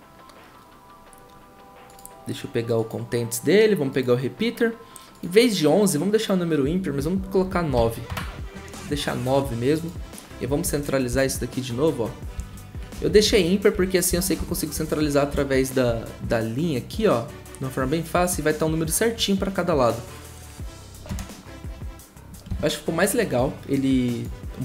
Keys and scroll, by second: 7.7 9, 8.1 Return, 11.1 shift+Down, 12.3 shift+Down, 12.9 shift+Up, 13.7 shift+Up, 14.1 shift+Down, 14.7 shift+Up, 15.3 shift+Down, 21.0 0.